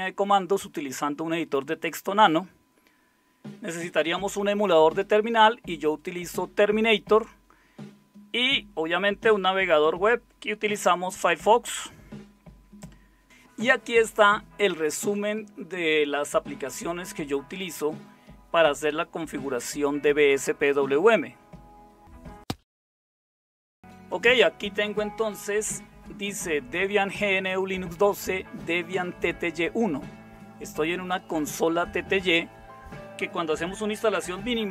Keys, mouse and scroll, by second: 11.6 space.